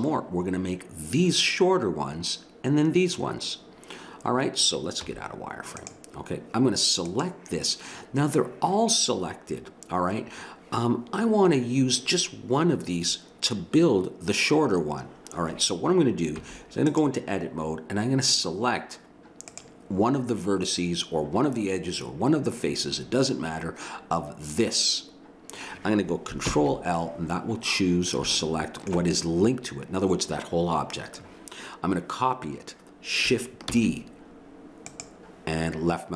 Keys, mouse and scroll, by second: 5.0 z, 16.3 Tab, 19.5-21.3 drag, 21.3 middle click, 26.4 ctrl+l, 29.5 middle click, 33.8 shift+d.